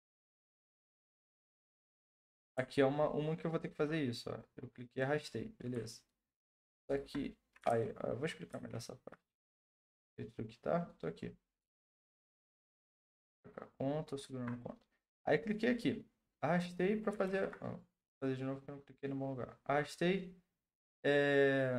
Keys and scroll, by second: 7.7 ctrl+z, 8.5 ctrl+z, 9.6 ctrl+z, 17.2 ctrl+z.